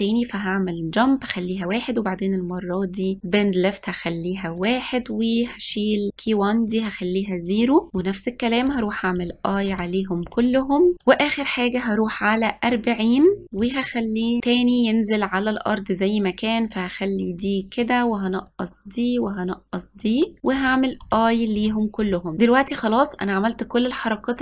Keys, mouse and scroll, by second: 3.4-7.9 drag, 9.3 i, 10.3 i, 11.1-13.4 drag, 14.6-17.7 drag, 17.9-20.6 drag, 21.1 i, 22.1 i.